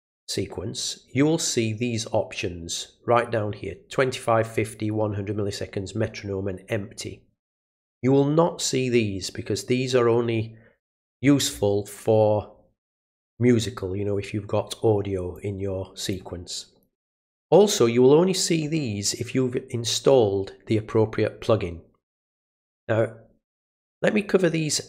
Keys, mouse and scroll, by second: 10.8 middle click, 11.2-11.6 scroll down 2, 15.3 click.